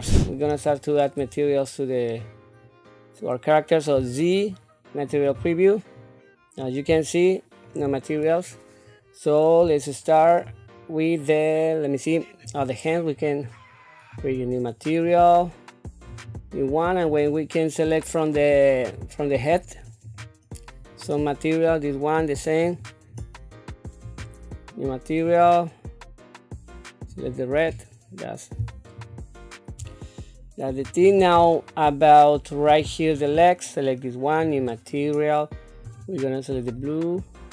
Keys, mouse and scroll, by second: 0.1 shift+middle click, 0.6 scroll up 2, 3.9 z, 7.0 shift+middle click, 8.5 scroll down 1, 9.8 shift+middle click, 12.4 click, 14.1 click, 16.1 click, 17.1-20.2 drag, 22.6 click, 24.0 click, 25.2-27.3 drag, 28.9 click, 29.9 shift+middle click, 31.0-31.5 scroll up 2, 31.5-32.6 shift+middle drag, 33.1 click, 34.4-35.6 drag, 35.8 click.